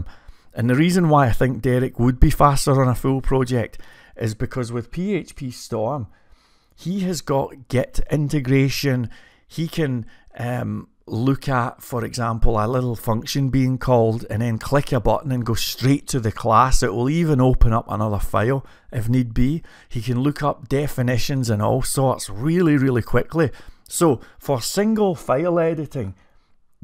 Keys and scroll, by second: 0.0-0.5 typing.